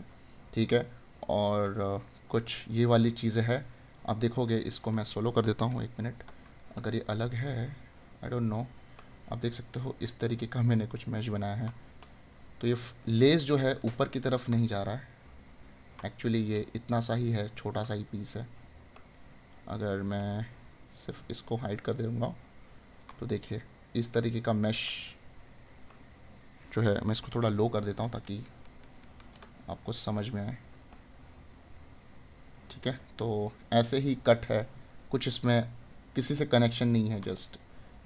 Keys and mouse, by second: 6.5 right click, 11.9 right click, 15.2 right click, 17.7 right click, 23.2 right click, 29.5 right click, 36.9 right click.